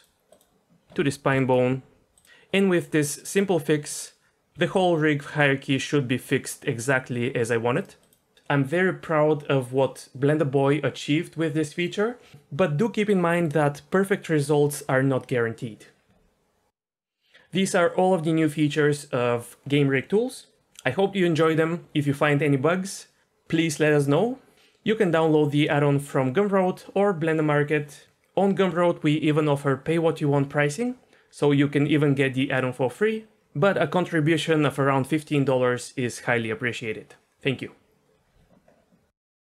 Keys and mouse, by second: 1.3 ctrl+p, 2.2 ctrl+z, 3.3 click, 4.5 r.